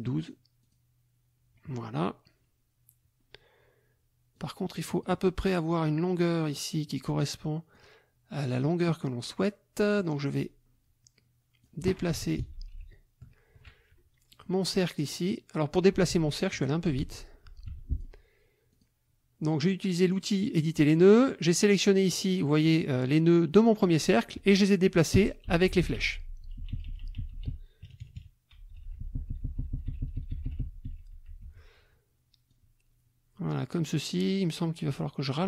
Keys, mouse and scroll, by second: 0.2 click, 0.6 click, 4.3 click, 7.7 click, 8.5 click, 9.8 click, 11.6 click, 12.4 shift+Left, 14.3 click, 16.1 ctrl+z, 17.0 ctrl+z, 17.7 ctrl+F1, 17.9 ctrl+click, 18.7 click, 20.6 click, 21.3-22.5 drag, 22.7 click, 25.1 Left, 27.9 KP_Subtract, 28.6 Left, 31.4 F1, 32.5-34.3 drag.